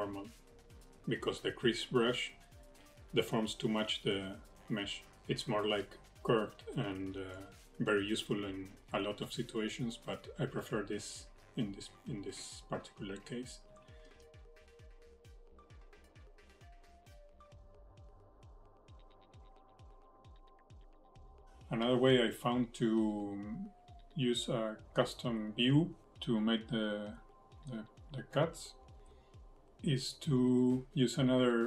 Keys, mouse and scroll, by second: 0.4 click, 1.6 ctrl+z, 1.8 click, 2.1-2.7 scroll up 5, 2.3 shift+middle click, 2.7 shift+middle click, 3.0 click, 4.9 click, 5.0 click, 6.0 click, 6.4 click, 6.8 click, 7.1 click, 8.2 ctrl+z, 8.4 click, 8.5 click, 8.8 click, 10.6 middle click, 11.2 shift+middle click, 12.3 click, 15.7 middle click, 16.7-17.1 scroll up 6, 16.8 shift+middle click, 17.3-17.7 scroll down 2, 17.8 click, 19.2 click, 20.1-20.4 scroll up 4, 20.4 middle click, 20.7 shift+middle click, 21.1-21.4 scroll down 13.